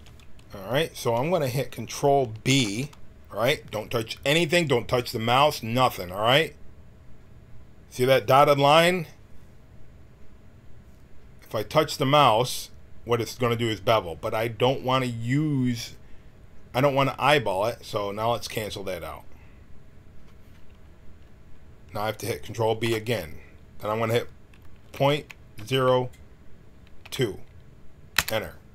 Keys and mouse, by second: 2.4 ctrl+b, 22.8 ctrl+b.